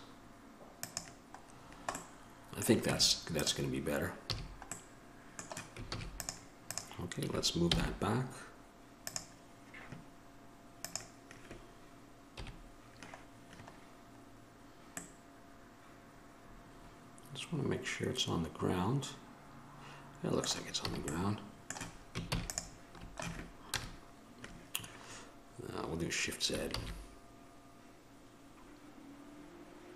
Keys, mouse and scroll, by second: 3.1 Tab, 3.1-4.5 drag, 4.5 a, 6.1 ctrl+s, 6.1-9.2 drag, 7.9 m, 12.5 KP_1, 16.5 middle click, 21.1 a, 21.3 middle click, 22.5 ctrl+s, 23.9 KP_0, 27.7 shift+z.